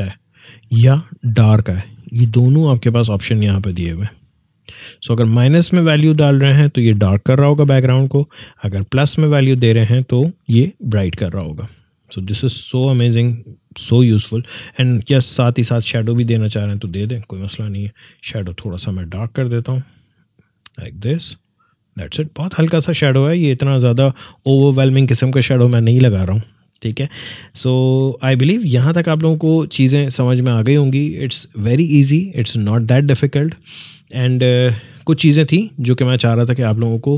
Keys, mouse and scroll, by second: 8.8-12.0 drag, 15.8-21.4 drag, 24.0 click, 27.5 click, 28.5-30.6 scroll down 1.